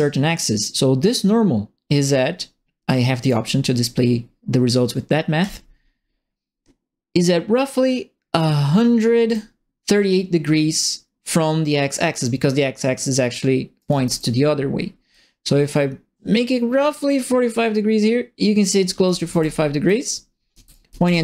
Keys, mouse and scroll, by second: 3.2 click, 5.4 click, 7.2-8.4 drag, 9.2 click, 13.7 right click, 13.8 s, 15.1-18.6 drag, 18.9-21.2 typing, 19.0 right click, 20.7 right click.